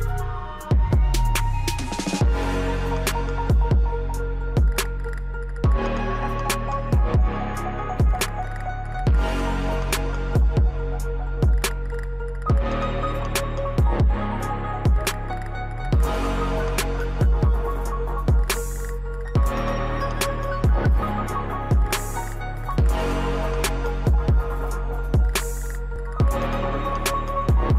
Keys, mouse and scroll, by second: 0.5-1.0 scroll down 1, 1.2-3.2 drag, 2.6 typing, 3.2 scroll up 1, 5.4-12.9 drag, 12.9 right click, 13.8 scroll up 1, 16.1-21.6 drag, 19.6 typing, 21.6-22.0 scroll up 1, 22.5-24.4 drag, 22.5 typing, 24.4-24.8 scroll down 1, 27.1-27.7 drag.